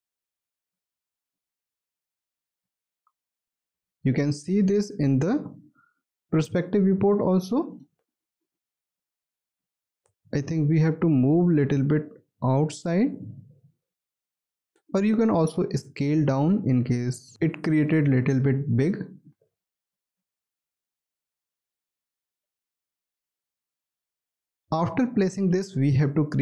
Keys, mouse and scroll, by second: 3.1 space, 4.8 alt+click, 6.0 alt+middle click, 7.0 alt+click, 7.9 alt+click, 10.0 space, 11.2-12.1 scroll up 1, 15.6 r, 20.9 w.